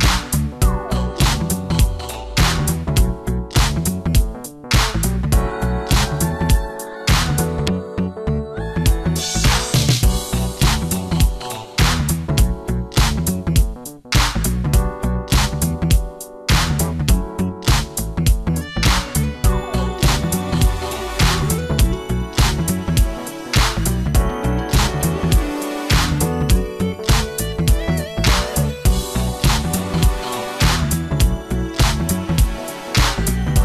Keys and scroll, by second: 1.3 ctrl+alt+d, 2.1 Return, 2.5 KP_Subtract, 3.1 ctrl+b, 5.7 Return, 6.2 ctrl+d, 6.4 ctrl+KP_Subtract, 7.3 ctrl+KP_Subtract, 8.5 ctrl+KP_Add, 26.4 space.